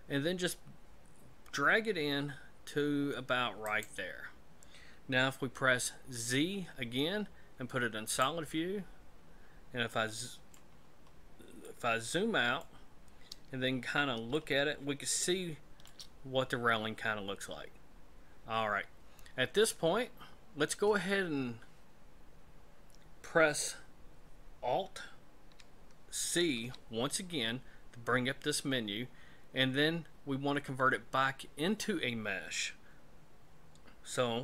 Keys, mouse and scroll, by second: 6.2 z, 8.9-9.9 scroll down 10, 9.9 middle click, 10.8-11.7 scroll down 4, 11.7 middle click, 12.9 scroll up 2, 13.7-14.2 scroll down 1, 14.4 shift+middle click, 26.3 alt+c.